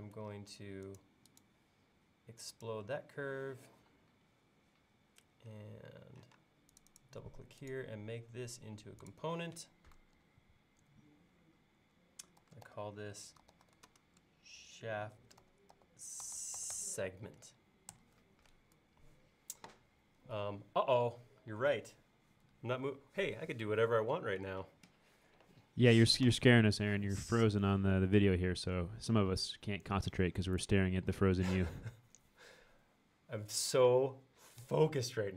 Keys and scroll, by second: 3.8 e, 6.4 space, 12.2-13.2 typing, 14.6-16.8 typing, 18.0 Return.